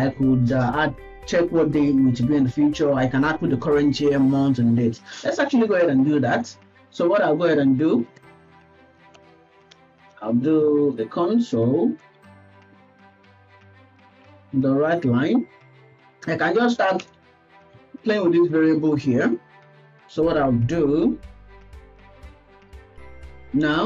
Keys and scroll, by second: 8.3 Tab, 8.5 Tab, 9.1 BackSpace, 14.9 Return, 15.8 Right, 17.0 BackSpace, 18.0 Left, 18.2 Left, 20.2 Left, 21.3 Right, 22.8 ctrl+s.